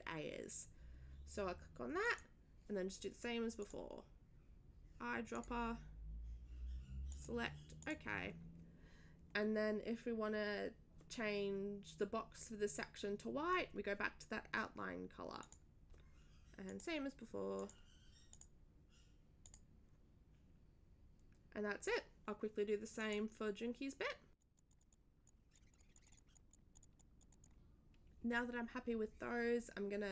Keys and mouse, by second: 2.0 click, 3.6 click, 5.3 click, 7.1 click, 7.8 click, 15.4 click, 15.7 click, 16.6 click, 17.5 click, 18.3 click, 19.4 click, 23.0 click, 24.4 click, 24.5 click, 24.7 click, 24.8 click, 24.9 click, 25.2 click, 25.5 click, 25.7 click, 25.9 click, 26.0 click, 26.3 click, 26.5 click, 26.7 click, 26.8 click, 27.0 click, 27.2 click, 27.3 click, 27.4 click.